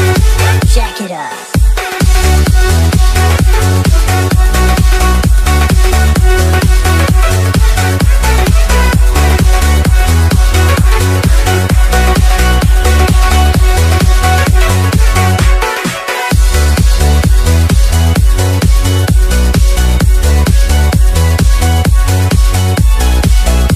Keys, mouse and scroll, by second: 1.2 alt+Tab, 6.2-6.6 scroll up 1, 6.6-8.1 scroll down 1, 9.4 click, 9.8-10.9 scroll up 1, 10.9 click, 12.0-13.5 scroll up 1, 16.0 BackSpace, 16.1 a, 18.1 BackSpace, 18.2 g, 19.4 click.